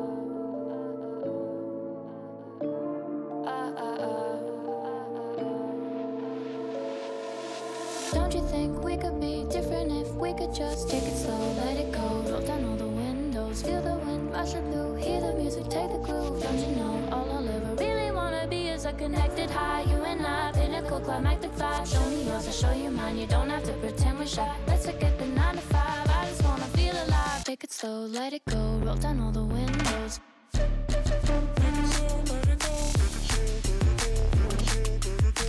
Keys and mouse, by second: 0.2 drag, 1.8-2.6 right drag, 3.2 shift+drag, 4.7 s, 5.9 s, 6.0 s, 8.7 s, 9.6 s, 10.9 z, 11.1 z, 11.4 s, 13.7-14.1 drag, 14.5 shift+drag, 15.0 click, 15.3 shift+drag, 15.9 g, 17.9 click, 18.2 s, 19.9 z, 20.0 z, 20.5 click, 20.7 g, 22.5 click, 23.3 g, 25.2 x, 25.4 x, 25.6 click, 26.3 Tab, 26.7 a, 27.0 shift+click, 27.6 s, 29.4 y, 29.5 Tab, 30.0 shift+middle click, 30.4 shift+middle drag, 31.4 g, 32.5 z, 32.5 z, 33.6 click, 34.2 KP_1.